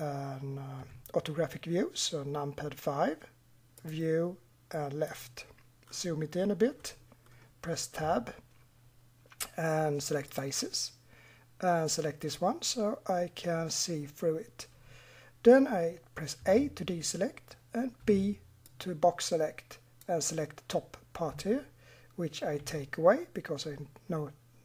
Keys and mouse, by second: 0.0-0.8 middle drag, 0.8 KP_5, 5.2 click, 5.4-5.8 drag, 5.8-9.0 middle drag, 8.0 Tab, 9.6-10.3 middle drag, 12.3-13.9 middle drag, 16.4 a, 18.0 b, 22.6 Delete.